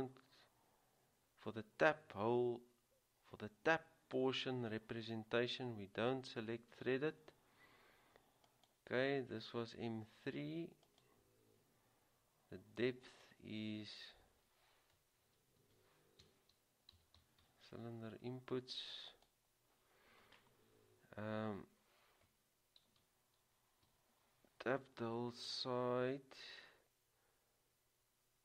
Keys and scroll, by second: 15.8-16.4 typing, 18.9-19.7 typing, 23.0-24.0 typing.